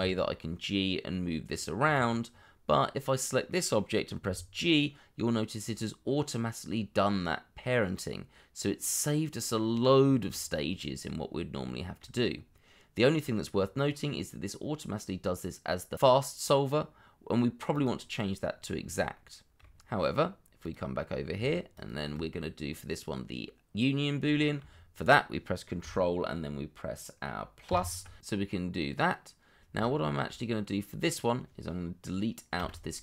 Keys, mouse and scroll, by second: 1.8 Escape, 3.4 middle click, 4.2 g, 10.1 Escape, 10.6 scroll down 1, 11.6 shift+middle click, 12.2-13.4 scroll up 1, 18.4-18.9 scroll down 1, 19.1 shift+middle click, 20.0-20.4 scroll up 1, 21.7 shift+click, 22.2-23.1 scroll down 1, 24.4 shift+middle click, 24.7-25.8 scroll up 1, 27.6 ctrl++, 29.9 shift+middle click, 32.6 Delete.